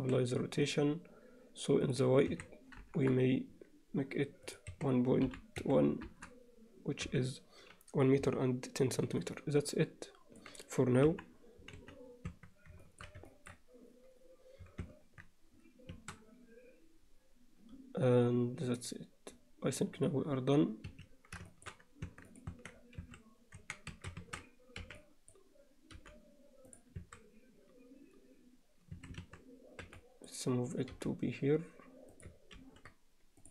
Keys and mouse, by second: 1.9 click, 4.5-6.3 drag, 7.1 n, 9.2-10.4 alt+middle drag, 11.1 KP_1, 11.8 z, 12.3 Tab, 12.9 shift+middle click, 13.3 ctrl+alt+middle click, 15.1 Tab, 15.9 a, 18.8 click, 21.5 alt+shift+middle click, 22.1 Tab, 22.3 click, 22.5 Tab, 23.1 a, 23.6 1, 23.9 a, 24.8 b, 26.0 g, 27.0 a, 29.0 a, 29.9 b, 30.9 g, 32.6 ctrl+r.